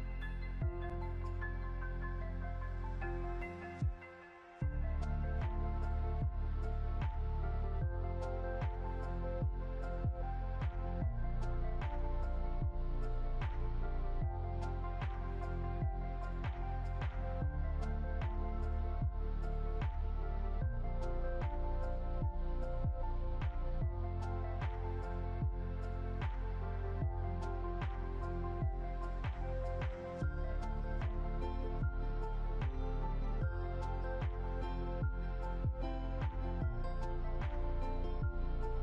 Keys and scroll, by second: 8.9 Delete, 9.8 ctrl+z, 11.2 Delete.